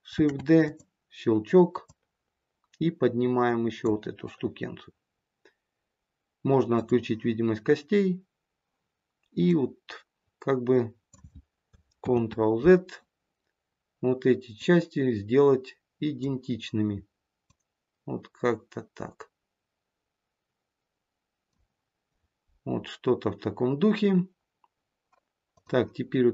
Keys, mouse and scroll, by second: 0.1 shift+d, 1.8 click, 6.7 click, 9.4 click, 11.9 ctrl+z, 14.5 click, 17.4 click, 25.4 click.